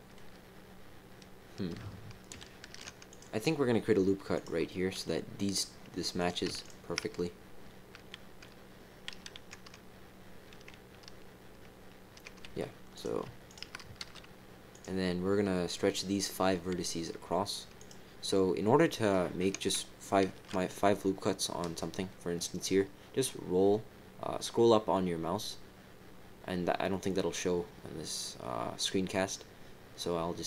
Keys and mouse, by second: 2.6 ctrl+r, 4.6 click, 6.1 click, 6.6 shift+click, 12.4 f, 12.9 click, 13.4 shift+click, 14.0 f, 14.7 click, 17.7 click, 20.2 ctrl+r.